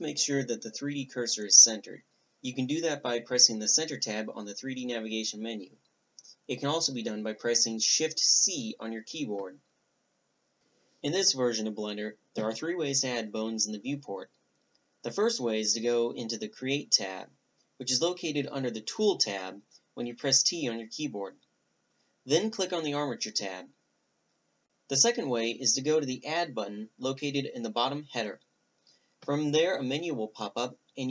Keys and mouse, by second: 6.9-8.4 drag, 9.8 shift+c, 14.9-15.2 drag, 15.2-16.8 middle drag, 22.1-23.8 drag, 24.8 click, 26.6-31.1 drag.